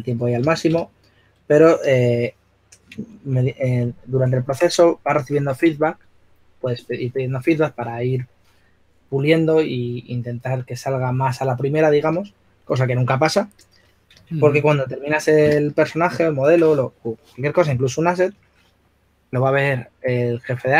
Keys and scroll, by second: 3.2 super+z, 3.6 super+z, 4.0 super+z, 16.1 s, 19.1 shift+f.